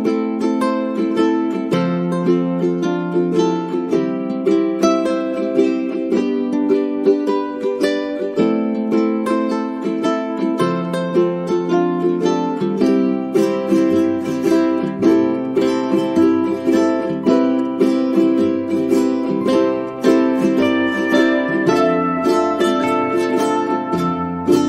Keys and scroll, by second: 6.4 Caps_Lock, 6.5-8.3 typing, 13.2 ctrl+a, 23.2-24.6 typing.